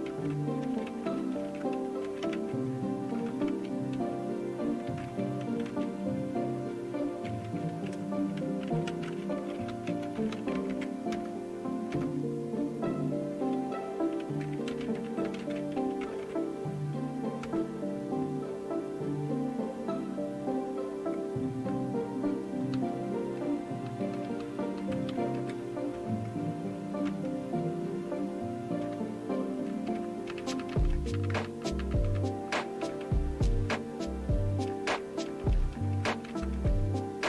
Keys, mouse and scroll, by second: 0.1-5.5 typing, 8.2-11.2 typing, 11.9 Return, 21.7 Return, 22.7 Down, 23.2 Down, 23.5 Down, 23.8 Down, 24.1 Down, 24.6 Down, 24.8 Down, 25.3 Up, 25.9 Return, 27.3 Return, 28.8 Up, 29.3 Up, 29.4 Up, 29.9 Up, 30.3 Up, 30.5 Up, 30.7 Up, 30.9 Up, 31.3 Return, 32.9 Return, 34.7 Up, 35.2 Up, 35.5 Up, 35.8 Up, 35.9 Up, 36.3 Down, 36.7 Return.